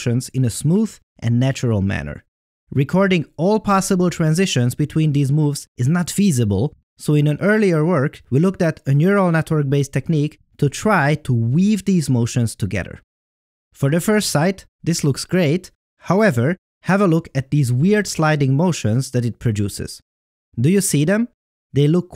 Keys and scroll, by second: 3.6 Right, 4.1 Up.